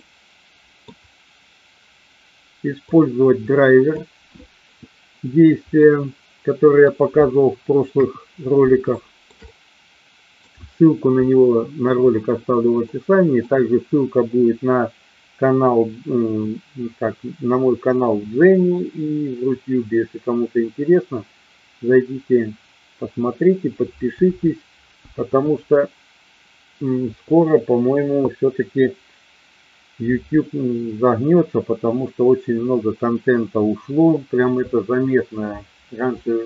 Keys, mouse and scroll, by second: 0.0-0.8 middle drag, 3.0-3.8 drag, 5.8-6.8 middle drag, 7.8 KP_1, 9.0 shift+middle drag, 9.3-10.3 middle drag, 12.8 middle click.